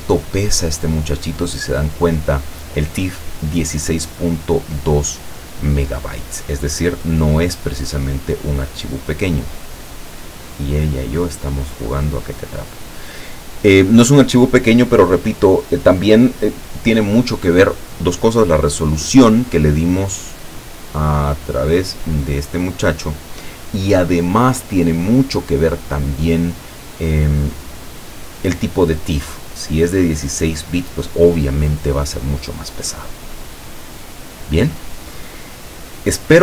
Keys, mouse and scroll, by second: 0.6 click, 5.0 click, 6.0 click, 19.9 click, 33.8 click, 35.8 click.